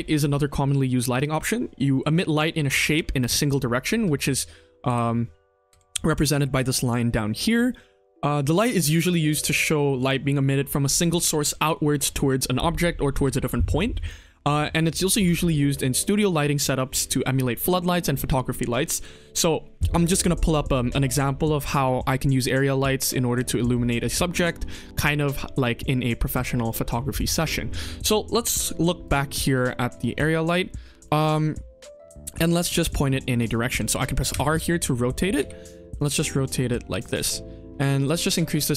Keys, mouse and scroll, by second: 4.2 KP_1, 4.3-4.8 scroll down 2, 4.8 r, 7.6-7.9 shift+middle drag, 8.8 middle drag, 9.3-9.9 scroll up 2, 9.9 click, 28.1-28.7 scroll up 3, 28.5 middle click, 29.0 click, 29.2 click, 29.5 middle drag, 29.9 shift+middle drag, 31.0 shift+middle drag, 31.9 KP_1, 32.3 r, 34.2 r, 35.3 g, 36.1-36.7 middle drag, 37.9 click, 38.6 KP_0.